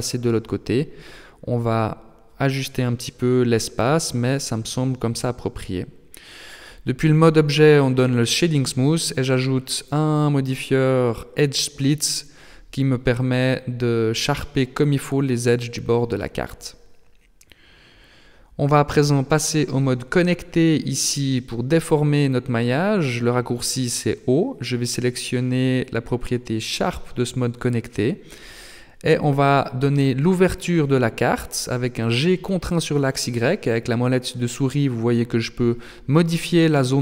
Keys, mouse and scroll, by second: 2.9 Tab, 4.5 click, 6.4 shift+middle click, 8.1 click, 14.2 click, 17.8 Tab, 19.2 right click, 21.0 click, 24.4 click, 27.2 middle click, 29.4 g.